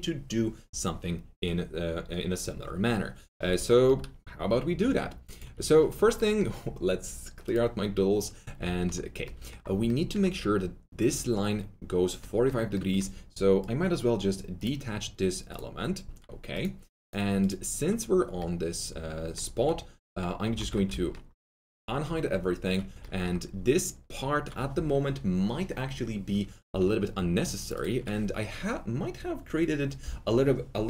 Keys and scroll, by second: 20.5 alt+q, 26.6 2.